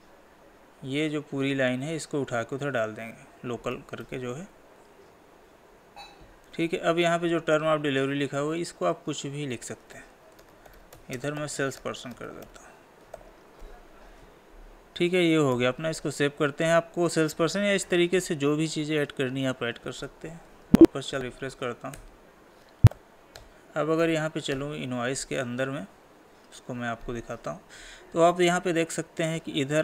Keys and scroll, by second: 4.1 ctrl+c, 6.5 ctrl+v, 11.2 space, 15.5 ctrl+s, 20.4 Escape, 23.4 ctrl+p, 24.7 Left.